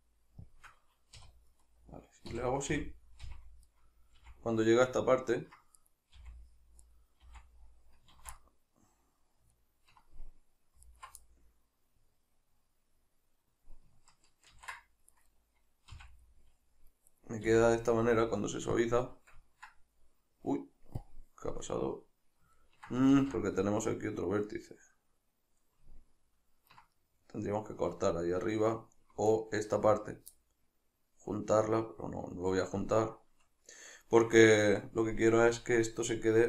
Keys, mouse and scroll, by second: 0.5 shift+click, 1.2 2, 1.5 right click, 2.3 f, 3.7-5.8 middle drag, 4.2 f, 5.8 right click, 6.2 f, 6.9 right click, 7.3 f, 8.4-10.9 middle drag, 10.9 alt+right click, 11.3-15.1 middle drag, 14.5 ctrl+x, 15.1 right click, 15.9 f, 16.3-17.1 middle drag, 17.1 right click, 17.5 f, 17.8-18.8 middle drag, 18.8 click, 19.5-21.0 ctrl+middle drag, 21.0 click, 21.5-29.3 middle drag, 23.2 ctrl+z, 29.3 alt+right click, 30.4-35.6 middle drag, 35.6-36.4 drag.